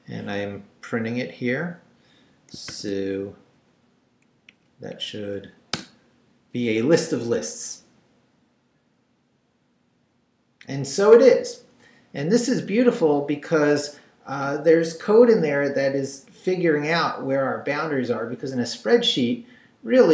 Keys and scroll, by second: 2.7 shift+;, 4.5 Up, 5.7 Return.